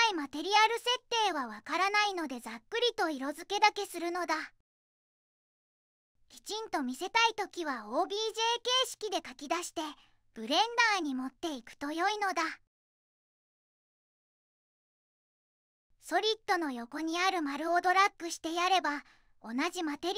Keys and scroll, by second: 4.3-5.1 typing, 5.5 Escape, 5.8 Escape, 7.1 m.